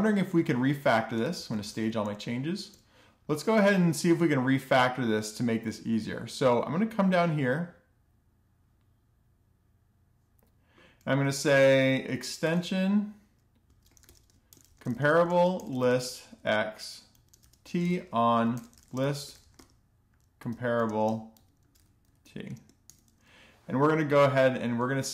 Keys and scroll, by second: 0.7 shift+super+p, 0.8-1.8 typing, 2.3 Return, 11.0 Return, 11.2 Return, 11.2-22.5 typing, 24.5-25.1 typing.